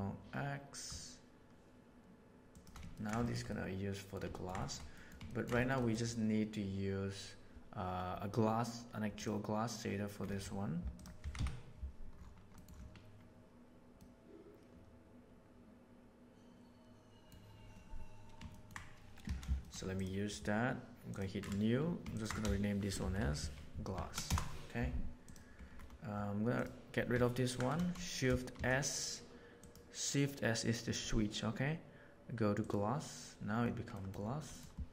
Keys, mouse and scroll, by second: 2.9 ctrl+middle click, 3.2 shift+middle click, 3.4 middle click, 4.2 ctrl+middle click, 4.5 shift+middle click, 4.9 middle click, 5.2 ctrl+middle click, 5.5 shift+middle click, 5.7 middle click, 18.4 middle click, 19.3 alt+a, 19.5 shift+middle click, 21.0 drag, 22.2-24.8 ctrl+shift+drag, 28.5 shift+s, 34.0 middle click, 34.4 middle click.